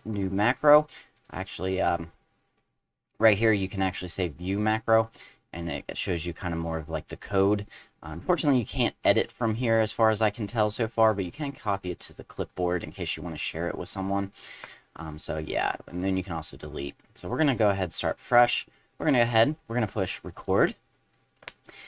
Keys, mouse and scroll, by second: 1.1 click, 1.7 click, 1.9 click, 2.6 right click, 4.3 click, 5.6 middle click, 6.4 click, 7.9 click, 8.4 click, 9.1 space, 9.5 click, 9.9 right click, 10.6 click, 14.2 click, 15.1 right click, 16.1 click, 17.2 click, 20.3 click.